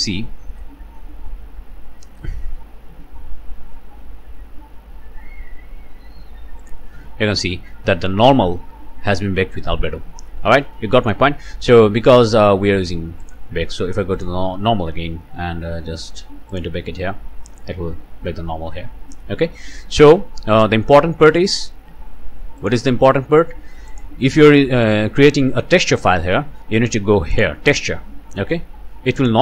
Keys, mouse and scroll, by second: 6.6 click, 10.8 click, 12.1-12.6 scroll up 1, 13.2 click, 14.1 click, 14.6 scroll down 1, 16.5 click, 19.4 scroll down 1, 22.6 click, 23.9 click, 27.3 click, 27.9 scroll down 1, 29.2 click.